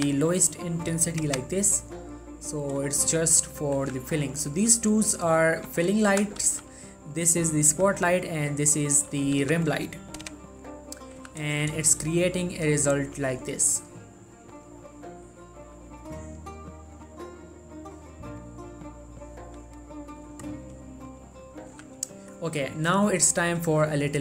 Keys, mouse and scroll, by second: 3.9 z, 5.1 scroll down 1, 5.2 middle click, 5.8 ctrl+middle drag, 6.2-6.6 shift+drag, 6.6 g, 6.8-7.3 right drag, 7.3 click, 7.6 middle drag, 7.9 g, 8.1-8.7 right drag, 8.7-9.5 drag, 9.5 g, 9.8 right click, 11.4 z, 12.1 shift+middle click, 13.0-13.3 scroll up 1, 14.7-20.1 drag, 21.9 z, 22.5 middle click, 23.9 click.